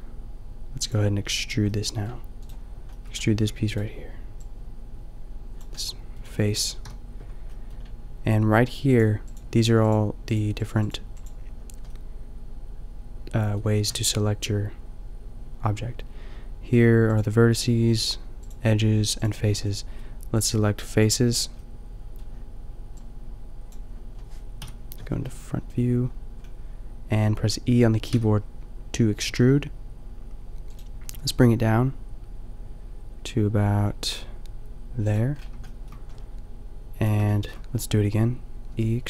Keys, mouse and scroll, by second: 2.5 middle click, 3.4 g, 3.9 middle click, 5.5 g, 5.8 middle click, 6.9 KP_5, 10.4-13.2 drag, 13.2-16.0 middle drag, 17.2 click, 19.7-23.2 drag, 24.6 KP_5, 28.1 e, 31.0 g, 35.3 shift+middle click, 35.7-37.1 middle drag, 37.4-38.7 middle drag, 38.7 e.